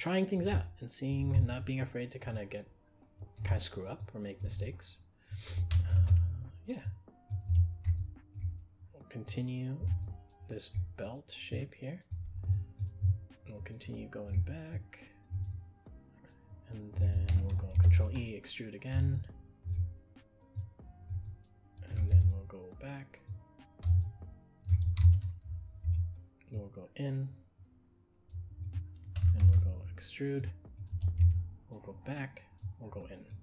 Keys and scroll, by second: 6.0 ctrl+e, 17.8 ctrl+e, 29.4 ctrl+e.